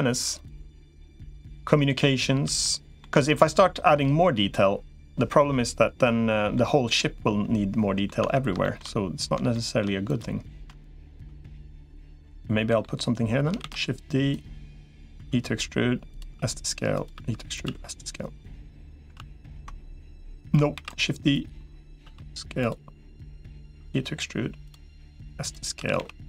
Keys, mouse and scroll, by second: 0.4 click, 2.4 shift+middle click, 3.1 middle click, 5.1-6.4 middle drag, 6.8-7.9 middle drag, 8.0 Tab, 8.4 shift+middle click, 9.3 shift+middle click, 12.1 middle click, 13.4 shift+d, 14.2 click, 15.0 e, 16.2 s, 17.0 e, 17.6 s, 19.0 ctrl+z, 20.6 shift+d, 21.2 click, 21.8 s, 23.6 e, 24.8 s, 25.6 s.